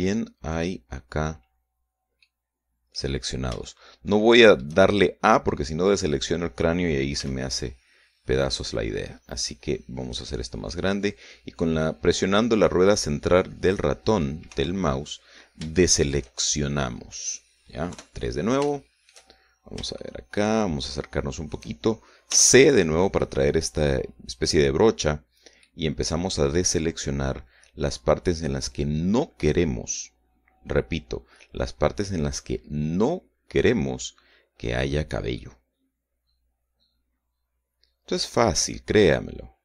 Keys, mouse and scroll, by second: 0.5-1.2 shift+scroll down 4, 2.6 middle click, 3.6-4.0 scroll down 1, 4.0 shift+middle click, 5.6 middle click, 7.6 c, 8.5-9.0 scroll down 1, 9.0 scroll up 1, 9.6-10.2 scroll down 2, 11.2-14.8 drag, 15.0 Escape, 15.4-16.0 scroll up 1, 16.2 shift+middle click, 17.2 middle click, 18.4 KP_3, 19.1 shift+middle click, 19.8-20.4 shift+scroll up 1, 20.4-22.2 shift+middle drag, 22.8 c, 26.1-34.6 middle drag, 34.8-35.2 scroll up 2, 35.8-39.6 middle drag.